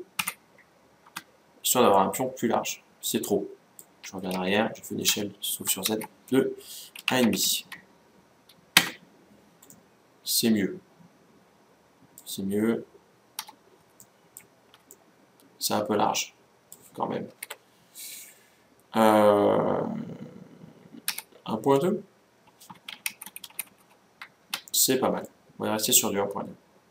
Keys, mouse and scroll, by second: 1.7-3.4 middle drag, 4.1 ctrl+z, 4.8 s, 9.4-11.3 middle drag, 13.1 z, 13.7-16.3 middle drag, 17.0 ctrl+z, 20.8 s, 25.0-26.8 middle drag.